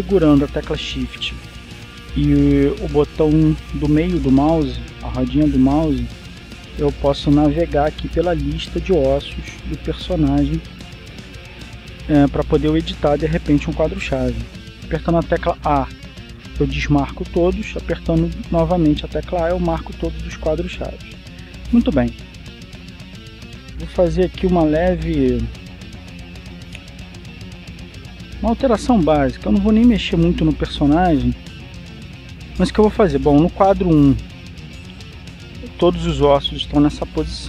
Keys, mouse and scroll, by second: 12.4-12.9 scroll up 2, 16.7 a, 18.8 a, 21.2 a, 25.2-26.9 drag, 27.0-27.9 scroll up 1, 27.9-28.4 scroll down 1, 28.9-30.8 middle drag, 31.1-32.8 middle drag.